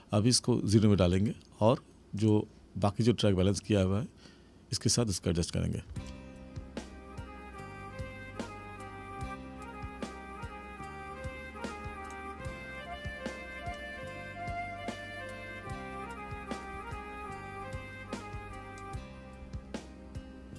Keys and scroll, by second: 5.8 space.